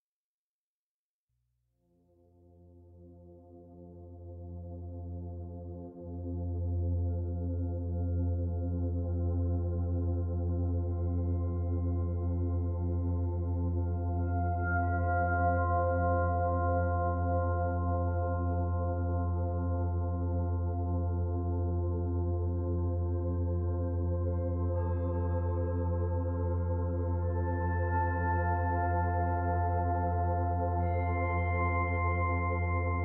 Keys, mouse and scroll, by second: 0.2 Tab, 1.2 click, 4.2 click, 4.5 click, 7.3 right click, 9.9 click, 10.3 click, 14.4 click, 17.3 click, 20.5 click, 23.0-23.5 scroll up 2, 23.5 shift+middle click, 25.4 shift+click.